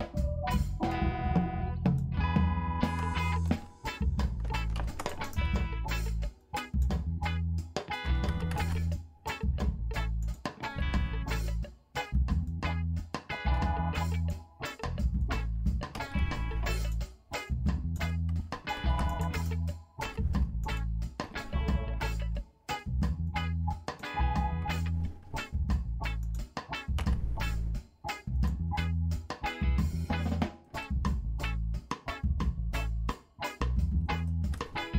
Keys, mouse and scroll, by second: 0.6 click, 1.2 g, 1.9 click, 3.1 shift+click, 4.8 ctrl+r, 5.3 click, 6.4 click, 8.0 s, 8.6 shift+z, 10.2 click, 10.7 g, 12.4 click, 13.6 s, 14.2 click, 14.9 click, 16.0 s, 16.8 click, 17.6 click, 18.8 ctrl+r, 19.4 click, 20.0 s, 20.6 click, 21.2 g, 22.7 click, 23.4 click, 24.7 g, 26.2 click, 27.0 s, 28.4 click, 28.8-30.3 drag, 30.6 shift+middle click, 30.8 click, 31.4 middle click, 32.1 middle click, 33.1 middle click, 33.8 middle click, 34.3 shift+middle click, 34.6 middle click.